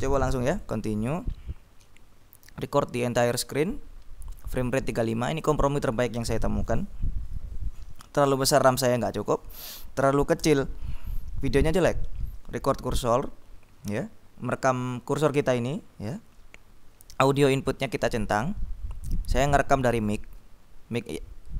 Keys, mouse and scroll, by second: 0.9 click.